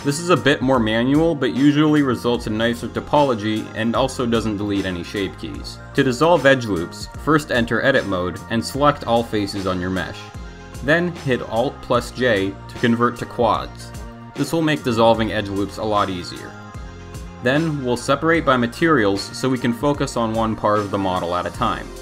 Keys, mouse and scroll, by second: 0.6 ctrl+z, 0.9 ctrl+z, 1.4 ctrl+z, 1.8 ctrl+z, 3.1-3.5 middle drag, 4.2 Tab, 5.0 middle click, 5.4 Tab, 6.8 Tab, 8.0 shift+middle click, 12.0 alt+j, 18.9 click, 20.3 click, 20.7 click.